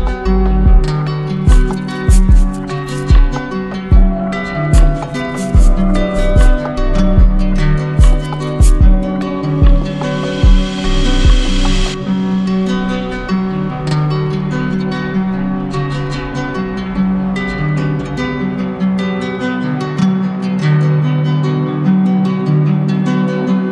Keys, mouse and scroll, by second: 1.0 alt+click, 2.8 alt+click, 3.0 ctrl+z, 6.7 alt+click, 6.9 ctrl+z, 10.9 alt+click, 16.4 alt+click, 21.4 z, 22.4 click.